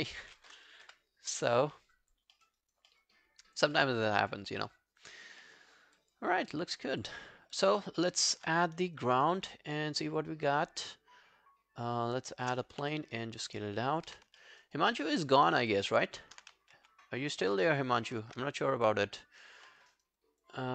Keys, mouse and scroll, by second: 1.3 scroll down 1, 2.0 alt+click, 2.4 alt+middle click, 2.6 alt+right click, 2.9 alt+middle click, 3.3 alt+scroll down 1, 3.5 alt+click, 3.8 alt+middle click, 4.0 alt+right click, 4.2 alt+click, 4.5 alt+middle click, 5.1 alt+click, 5.5 alt+middle click, 5.7 alt+scroll down 3, 6.0 alt+click, 6.4 alt+scroll up 3, 6.6 alt+click, 7.2 alt+scroll down 3, 7.7 alt+click, 8.0 alt+middle click, 9.0 shift+right click, 12.7 r, 14.1 w, 14.4 alt+middle click, 14.7 alt+right click, 14.9 alt+middle click, 15.2 alt+right click, 15.4 alt+click, 15.7 alt+middle click, 16.1-16.5 alt+scroll down 1, 16.8 ctrl+a, 17.6 ctrl+a, 19.7 alt+middle click, 19.9 alt+right click, 20.2 alt+click, 20.6 alt+right click.